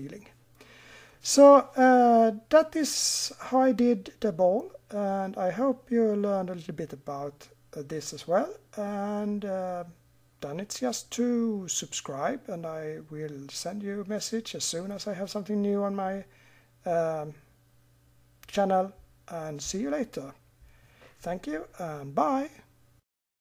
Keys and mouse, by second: 1.0-4.5 middle drag.